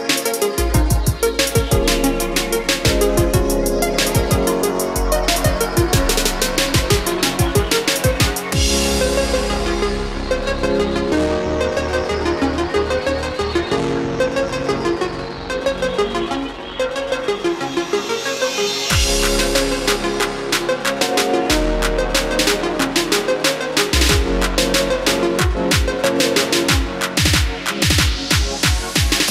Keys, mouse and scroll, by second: 11.2 KP_1, 14.5 click, 16.4 KP_1, 22.6-24.5 drag, 25.6 KP_1.